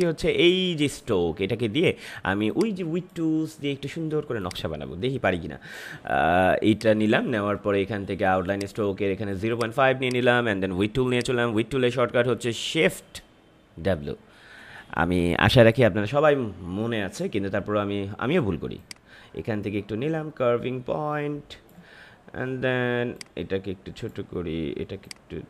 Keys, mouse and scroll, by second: 0.2-4.4 drag, 6.7-18.1 drag, 18.7-25.4 drag.